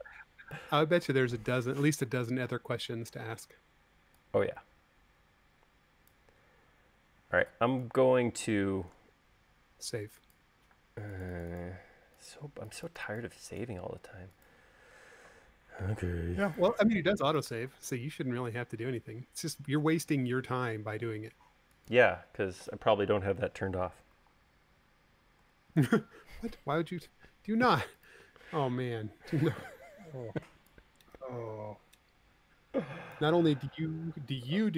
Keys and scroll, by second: 3.0 c, 8.3 p, 11.7 space, 16.6 m, 26.4 super+s, 28.2 space.